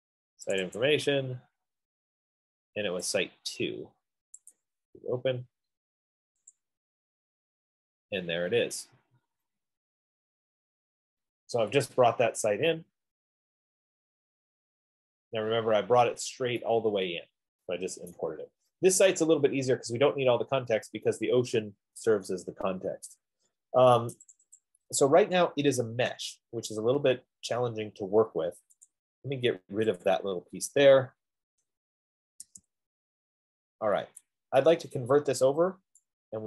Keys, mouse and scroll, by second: 0.8 click, 1.1 click, 3.6 click, 4.8 click, 6.9 click, 9.1 scroll, 9.8-12.4 scroll, 13.5-14.3 scroll, 15.4 scroll, 16.3 scroll, 18.4 right click, 22.1-23.5 right drag, 24.7-25.9 drag, 26.5 right click, 27.0-27.6 scroll, 28.1-28.8 scroll, 29.4 click, 30.5 click, 32.8 typing, 33.2 Return, 34.2-35.0 scroll, 35.5-36.1 scroll, 36.1-36.4 scroll.